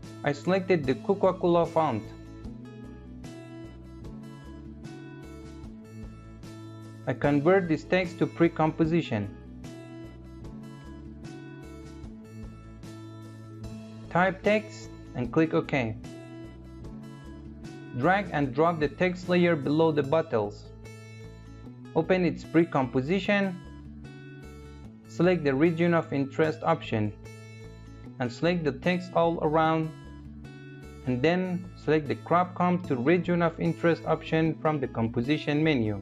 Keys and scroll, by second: 9.1 ctrl+shift+c.